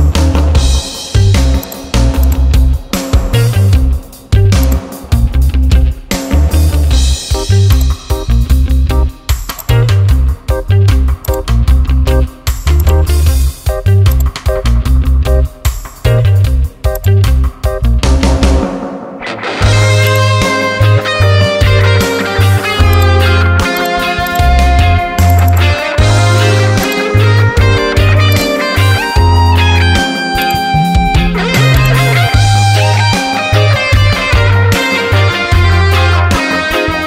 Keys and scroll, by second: 6.2 ctrl+j, 21.4 ctrl+j.